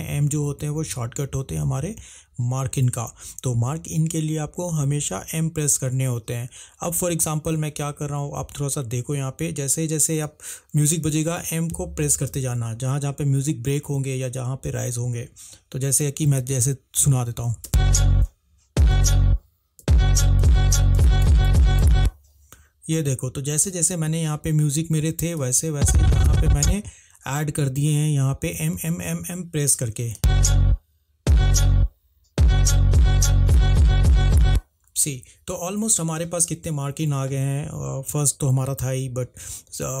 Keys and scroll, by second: 17.9 space, 18.3 m, 18.9 m, 19.9-21.9 typing, 30.3 space.